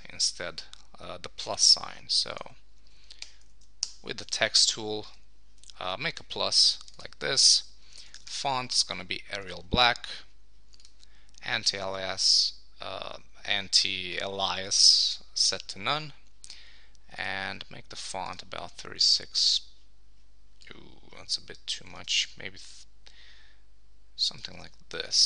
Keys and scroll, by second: 3.2 shift++, 3.8 super+Return, 9.4 Return, 22.0 super+t, 25.1 Return.